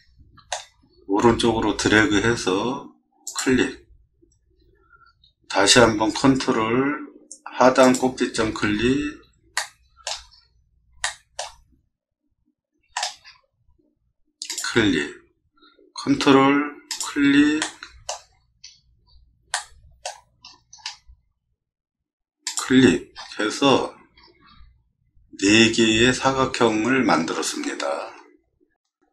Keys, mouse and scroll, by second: 7.8 click, 8.7 scroll up 2, 9.5-10.0 shift+middle drag, 10.3 middle click, 11.0 shift+middle click, 12.9 middle click, 13.2 middle click, 13.6 middle click, 14.5 click, 17.6 shift+middle click, 18.7 middle click, 19.5 shift+middle click, 20.4 middle click, 20.7 middle click, 22.4 click, 23.1 middle click, 23.6 middle click, 24.2 middle click, 24.2 scroll up 1, 24.9 scroll up 2, 27.5 middle click, 27.9 middle click.